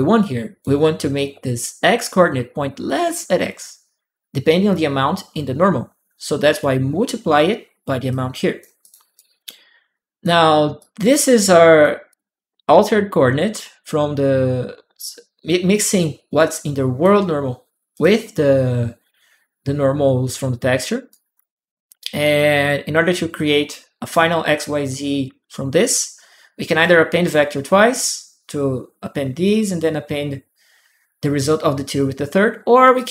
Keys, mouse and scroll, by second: 0.0 click, 1.7 click, 7.9 click, 8.6 click, 8.9 right click, 9.7 click, 10.5 click, 11.1 click, 11.9 click, 16.1 click, 17.7 click, 20.9 right click, 23.1 click, 25.5-26.6 drag, 32.7 click.